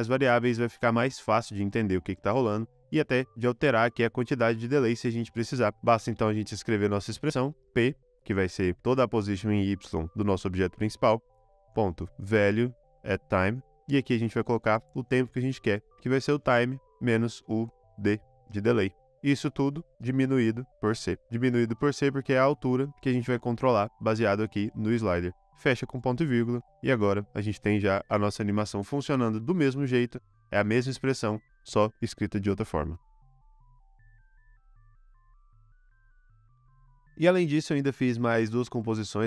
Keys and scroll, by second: 6.0 Return, 6.3 Return, 7.6 p, 11.7-14.1 typing, 15.7-17.6 typing, 19.9 -, 20.7 c, 25.6 ;, 34.2 space.